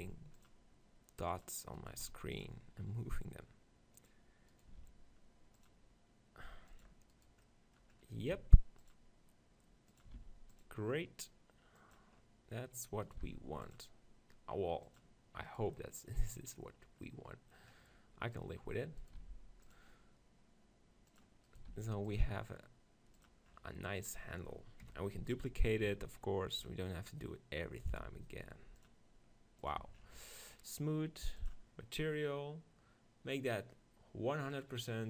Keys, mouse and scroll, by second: 1.8-3.8 right drag, 2.0 ctrl+r, 4.1-5.9 drag, 4.5-5.9 right drag, 4.8 ctrl+r, 6.8-8.8 drag, 7.2-8.8 right drag, 7.5 middle click, 8.4 ctrl+r, 8.4 middle click, 9.0 click, 10.0-11.8 drag, 10.2 ctrl+r, 12.0-13.6 drag, 13.1 right click, 13.4 ctrl+r, 15.1 click, 17.1 right click, 17.4 middle click, 19.0 right click, 19.2 ctrl+r, 21.5-23.2 drag, 21.7 ctrl+r, 23.3 click, 23.6-27.8 middle drag, 24.1 click, 24.1 right click, 25.9 ctrl+r, 27.9-29.6 drag, 28.1 ctrl+r, 29.8 Tab, 29.8 click, 30.5-35.0 drag.